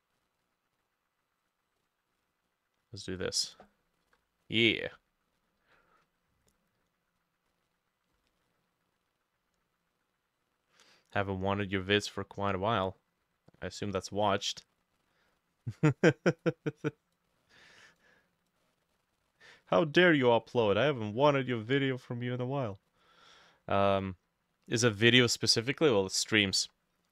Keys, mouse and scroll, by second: 1.8-6.1 drag, 3.8-4.6 typing.